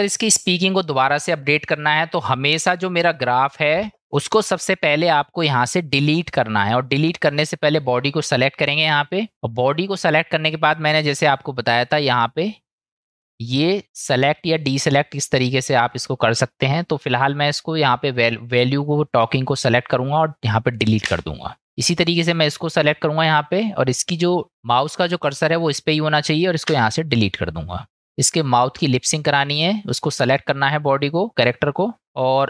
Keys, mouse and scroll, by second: 12.1 click, 13.1 click, 15.9 click, 21.1 Delete, 22.5 click, 23.8 click, 26.7 Delete.